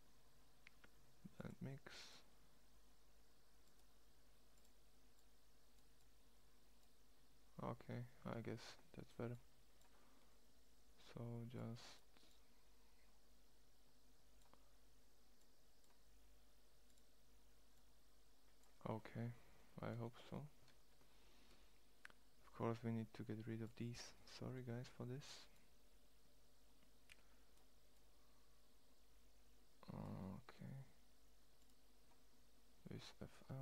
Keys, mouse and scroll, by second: 15.9-17.0 drag, 18.5-20.0 middle drag, 25.0-26.8 middle drag, 28.5 click, 31.4-32.8 middle drag.